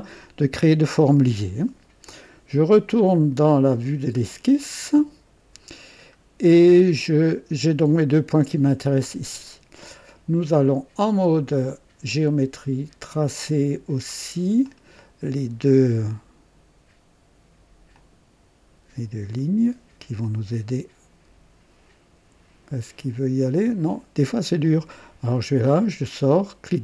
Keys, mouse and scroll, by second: 5.0 click, 5.9-6.2 scroll down 1, 6.5 right click, 14.6 click, 17.9 click, 20.2 click, 24.6 click, 25.3 right click, 26.5 right click.